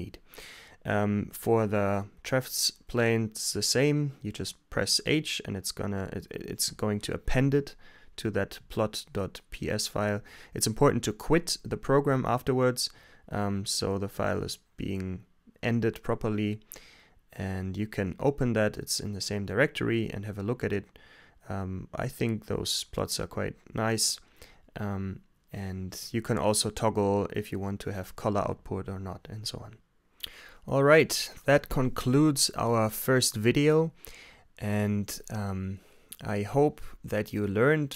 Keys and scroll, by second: 3.2 h, 3.9 Return, 6.3 Return, 7.8 Return, 7.9-9.8 typing, 12.1 super+w, 28.4 super+s.